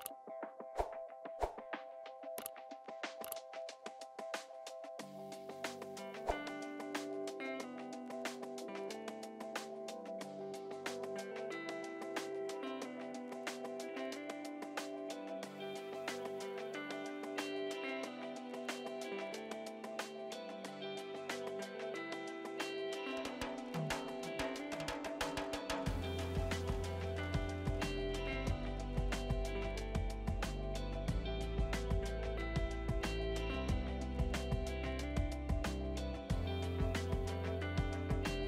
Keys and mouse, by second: 0.8 click, 6.1 click.